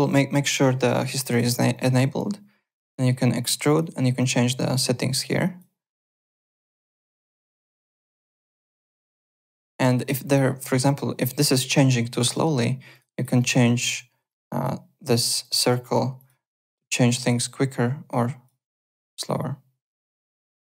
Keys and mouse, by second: 1.7 alt+click, 2.6 click, 3.7 click, 5.1 click, 6.2 click, 7.7 click, 8.5 click, 10.4 click, 12.9 click, 14.2 click, 15.1 click, 17.4 click, 19.4 click.